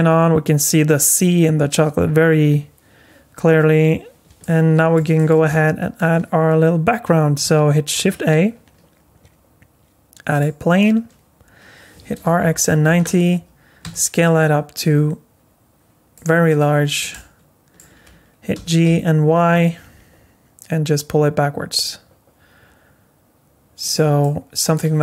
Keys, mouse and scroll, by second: 2.0-2.4 scroll down 2, 4.4 middle click, 5.2 shift+middle click, 5.5 middle click, 7.9 shift+a, 12.0 r, 13.8 s, 16.7 scroll down 5, 17.1 middle click, 18.5 g, 24.2 middle click.